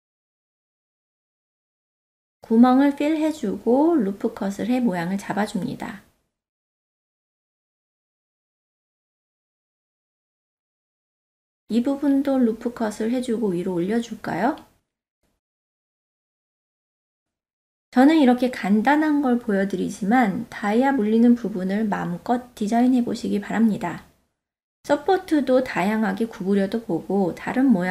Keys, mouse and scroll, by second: 1.1 2, 2.5 alt+click, 3.3 f, 4.3 ctrl+r, 7.3 middle click, 9.1 alt+z, 9.5 ctrl+middle click, 9.9 middle click, 11.3 ctrl+r, 13.2 middle click, 14.4 ctrl+r, 16.4-17.5 middle drag, 18.4 shift+click, 19.0 shift+click, 19.7-20.2 ctrl+middle drag, 21.3 g, 21.6 click, 21.7-23.2 drag, 23.4 middle click, 24.3 3, 24.5 click, 24.9 ctrl+KP_Add, 25.1 ctrl+middle click, 25.3 middle click, 25.6 click, 26.3 click, 26.6 ctrl+KP_Add, 27.0 click, 27.6 shift+middle click, 27.8 middle click.